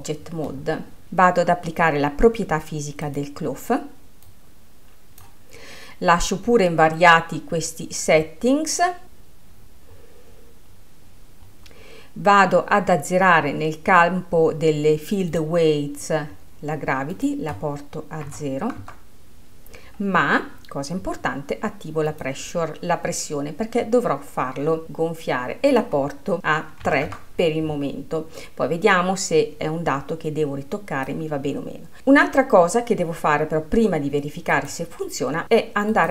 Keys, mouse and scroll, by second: 0.0-1.0 drag, 3.1-8.9 drag, 8.9-10.5 scroll down 10, 10.5-11.6 scroll down 10, 11.6-14.7 scroll down 1, 15.4 click, 16.0-16.4 scroll down 5, 17.2-19.9 drag, 19.9-20.6 scroll up 5, 20.9-22.1 scroll up 4, 22.1-24.9 drag, 25.9-32.0 drag, 34.5-36.1 drag.